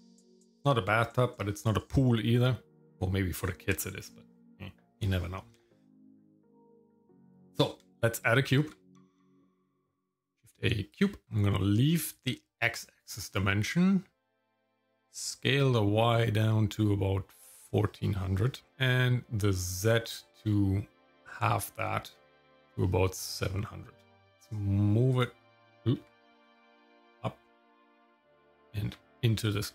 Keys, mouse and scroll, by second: 8.5 shift+a, 14.7-18.7 drag, 19.9-24.3 drag, 24.3 g, 26.0 g, 28.5 g.